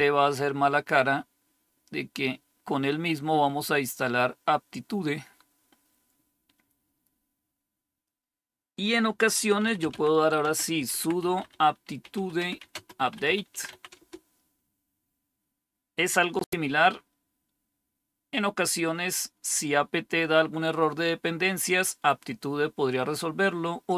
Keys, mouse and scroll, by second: 9.2-14.1 typing.